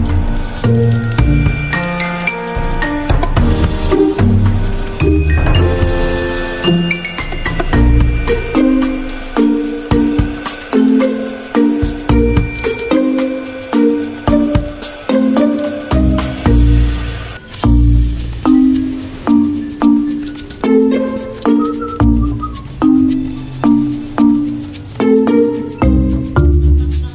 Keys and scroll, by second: 2.2 d, 4.9 space, 6.1 ctrl+a, 6.5 Caps_Lock, 6.8 k, 7.2 Escape, 9.1 typing, 9.6 alt+Left, 9.6 alt+Left, 9.8 alt+Left, 15.5 ctrl+g, 17.1 ctrl+z, 17.3 ctrl+z, 19.6 ctrl+z, 21.3 ctrl+g.